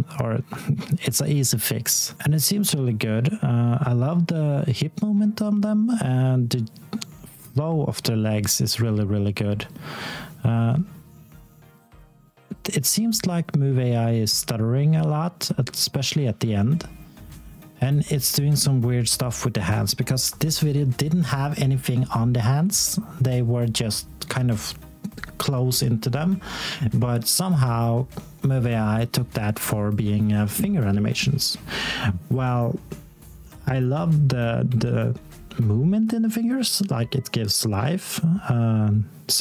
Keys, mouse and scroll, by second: 2.2 x, 15.6-16.3 scroll up 1, 16.3 s, 16.9 x, 17.7 click, 19.3 s, 20.4 click, 25.2 t, 26.0-27.6 scroll down 1, 28.7 x, 30.3 s, 30.9 click.